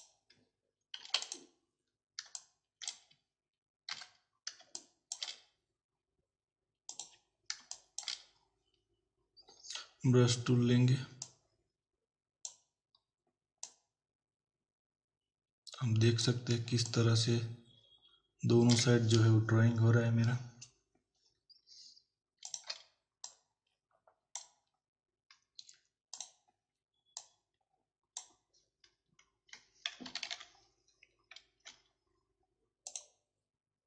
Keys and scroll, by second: 1.0 z, 2.3 space, 3.9 b, 4.6 space, 7.6 space, 16.7 space, 30.1 ctrl+-.